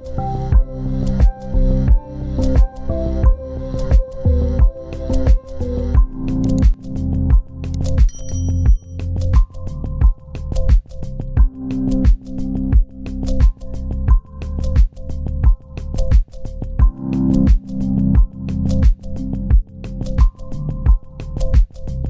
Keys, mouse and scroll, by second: 1.4 right click, 5.0 double click, 5.4 right click, 8.5 right click, 11.1-16.0 scroll up 1, 16.0 scroll down 1, 17.5 ctrl+space, 17.7 ctrl+click, 19.3 Left, 19.5 Left, 19.7 Up, 19.9 Up, 20.4 Left.